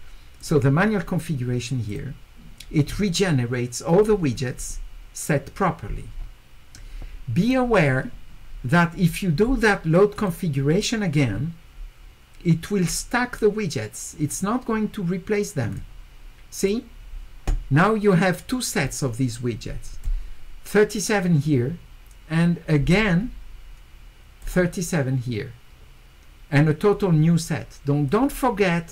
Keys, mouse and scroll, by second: 0.4 click, 1.9 click, 4.3 scroll down 2, 4.7 scroll up 2, 5.9 middle click, 5.9-6.3 scroll up 4, 6.2 middle click, 10.2 click, 11.3 middle click, 12.5 middle click, 12.5-13.3 scroll up 2, 15.7 click, 16.6 click, 18.5-20.0 drag, 22.4-24.4 drag, 28.1-28.9 drag.